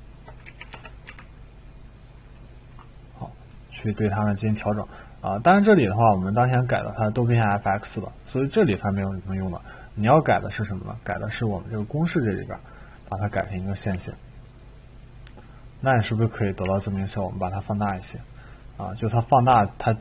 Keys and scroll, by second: 0.4 e, 1.1 e, 13.9 e, 16.6 t.